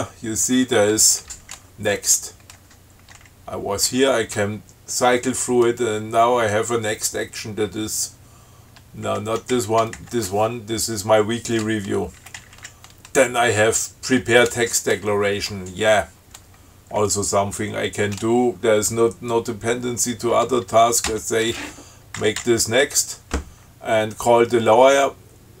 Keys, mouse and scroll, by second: 0.1 shift+Right, 3.4 shift+Left, 4.1 shift+Right, 9.3 shift+Left, 9.7 shift+Down, 10.2 shift+Right, 12.3 Down, 21.3 shift+Right, 22.4 Down.